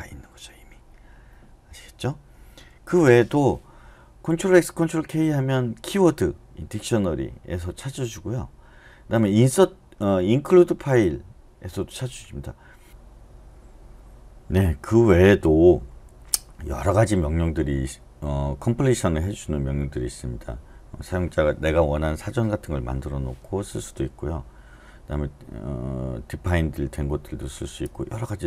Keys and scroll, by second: 2.5 Escape.